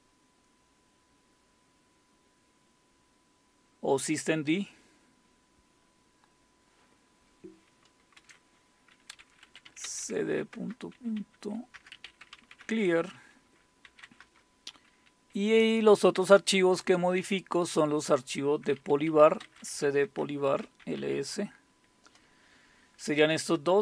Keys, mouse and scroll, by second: 8.2 ctrl+x, 9.2-14.9 typing, 18.8-21.6 typing, 20.5 Return.